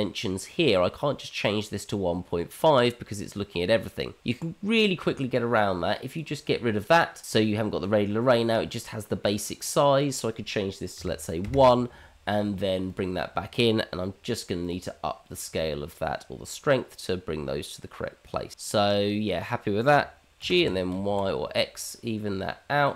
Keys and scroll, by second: 20.4 g.